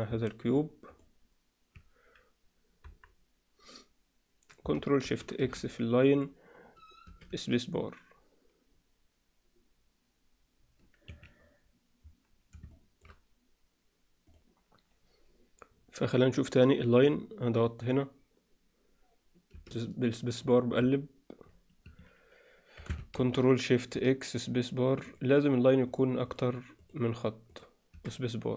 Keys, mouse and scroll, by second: 0.2 middle click, 0.9 click, 2.7 KP_1, 5.0 ctrl+shift+x, 7.2 space, 11.0 Escape, 12.6-13.0 alt+shift+middle drag, 14.3-22.0 middle drag, 23.1 ctrl+shift+x.